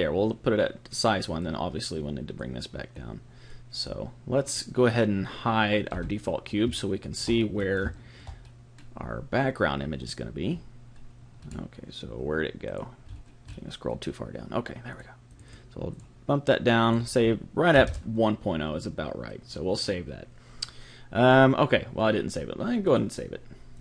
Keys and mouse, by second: 1.4 click, 3.5 click, 5.9 h, 6.7-12.7 middle drag, 12.7 click, 14.6 middle click, 14.9-18.6 drag, 22.8 click.